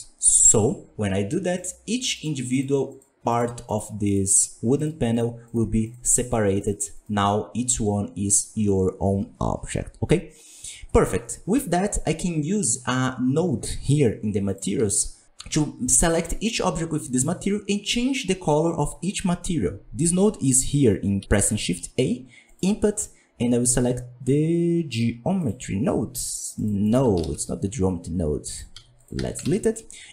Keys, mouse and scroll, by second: 1.1 Tab, 1.5 right click, 2.1 right click, 2.4 right click, 2.8 right click, 3.2 right click, 3.6 right click, 4.0 right click, 4.7 right click, 5.1-5.5 right drag, 5.8 right click, 6.2 right click, 6.5-7.0 right drag, 26.9 click, 28.7 x, 28.9 click, 29.1 x.